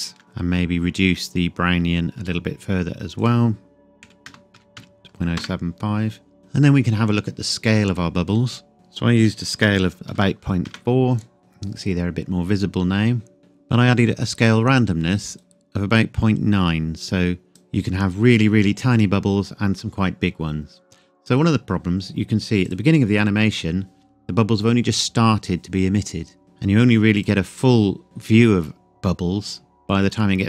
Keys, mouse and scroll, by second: 0.0 KP_Enter, 0.2 click, 0.4-3.2 scroll up 1, 3.2 click, 4.0 KP_Decimal, 4.2 KP_0, 5.4 KP_Enter, 8.4-8.7 scroll up 1, 8.7 click, 9.5 KP_Decimal, 10.0 KP_4, 10.6 KP_Enter, 15.4 click, 22.6 click, 27.1 click.